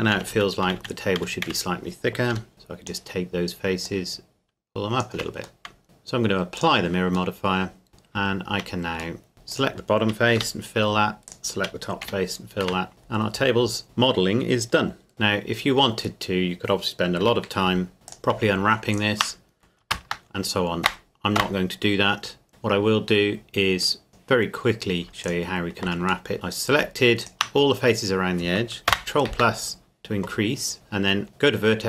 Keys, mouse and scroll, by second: 0.1-2.3 typing, 2.5 click, 5.2 Tab, 5.6 middle click, 5.8-6.5 scroll down 1, 6.6 click, 7.3 middle click, 7.9 scroll up 1, 9.2 middle click, 9.5 alt+right click, 10.4 f, 11.3 alt+right click, 12.1 f, 12.6 Tab, 12.9-13.4 scroll down 1, 13.8 middle click, 14.7 scroll up 1, 15.1 middle click, 17.2 Tab, 17.8 scroll up 1, 18.1 click, 18.9 alt+right click, 21.4 ctrl+KP_Add, 24.1 click, 24.7-25.0 scroll up 1, 25.3 alt+right click, 26.3 middle click, 26.8 click, 27.2 alt+right click, 28.9 ctrl+KP_Add.